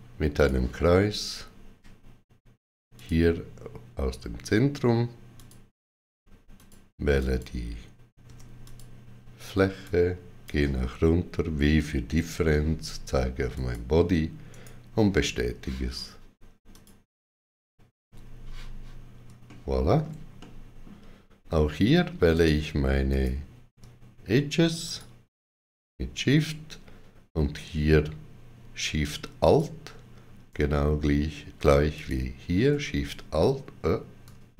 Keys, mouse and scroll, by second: 0.2 click, 2.8 click, 2.8 middle click, 5.2 click, 8.1 Tab, 8.5 click, 9.7 click, 12.2 w, 13.4 click, 14.3 right click, 16.5 click, 17.9 x, 19.3 shift+middle click, 20.2 shift+middle click, 22.2 shift+middle click, 22.2 click, 23.0 click, 23.0 click, 24.7 shift+click, 29.3 alt+shift+click, 31.8 alt+shift+click.